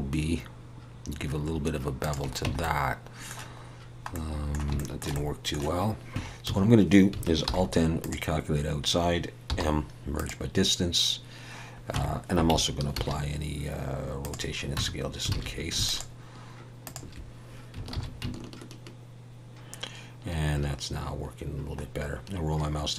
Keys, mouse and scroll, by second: 2.5 Tab, 2.6 middle click, 4.1 middle click, 4.8 shift+middle click, 5.2 middle click, 6.1 Tab, 6.5 a, 7.5 alt+n, 9.5 m, 11.9 Tab, 12.9 ctrl+a, 14.8 Tab, 15.3 alt+a, 15.8 alt+shift+click, 18.1 ctrl+b.